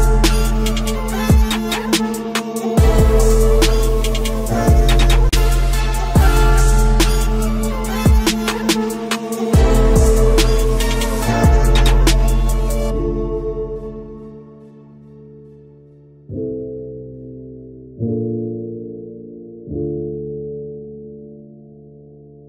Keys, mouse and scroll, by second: 0.0 middle click, 1.3 ctrl+r, 2.8 ctrl+r, 4.2 ctrl+r, 9.7-12.6 middle drag, 12.6 ctrl+r, 12.8 middle click, 14.0 ctrl+r, 14.9-18.9 middle drag, 16.9 ctrl+r.